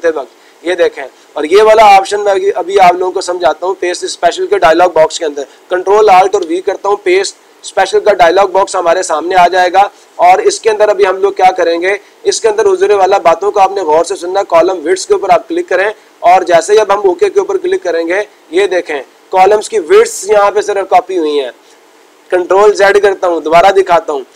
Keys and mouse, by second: 3.3-4.3 drag, 11.3-12.4 drag, 14.2-15.3 drag, 18.3-19.4 drag, 24.2 click.